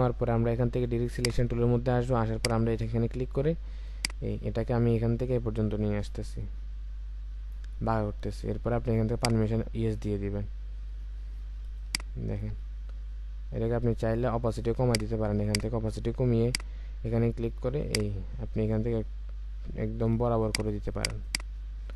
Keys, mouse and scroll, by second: 11.0-11.8 alt+scroll up 1, 11.8 alt+scroll up 1, 20.2 space, 20.9 space.